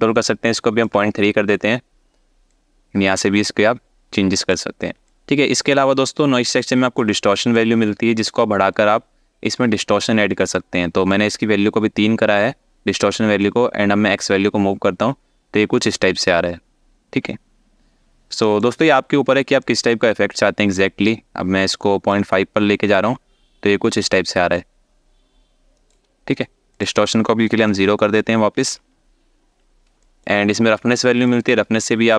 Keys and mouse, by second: 2.1-4.2 drag, 4.7 alt+shift+middle click, 7.3-9.3 drag, 10.2 alt+shift+middle click, 13.2-18.2 shift+drag, 19.2 ctrl+click, 22.7 shift+click, 26.4-27.8 drag, 29.7 alt+shift+middle click, 31.0-32.1 shift+drag.